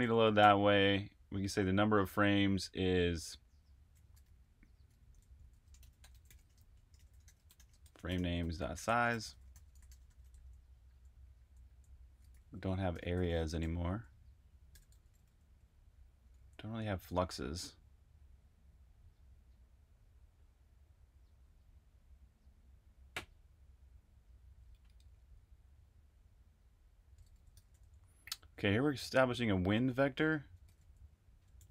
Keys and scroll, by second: 0.0-0.3 typing, 4.2-15.2 typing, 16.3 j, 27.1-28.5 typing, 30.5-31.5 typing.